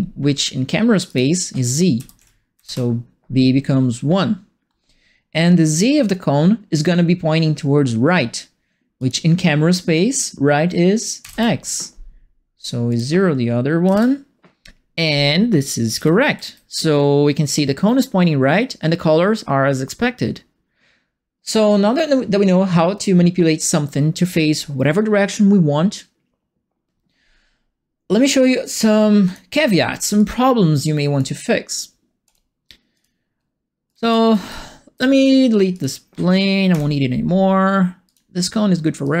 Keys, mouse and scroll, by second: 1.0 click, 1.9 KP_0, 2.1 Tab, 2.5 KP_1, 2.6 KP_Enter, 8.9 click, 11.2 KP_1, 12.9 click, 13.8 KP_0, 15.6-16.8 typing, 15.6-17.8 right drag, 29.2 click, 30.1-31.1 drag, 32.2 click, 32.9 click, 33.6-34.9 typing, 33.8-34.9 right drag, 35.7 click, 36.7 Delete, 38.0 click, 39.0 click.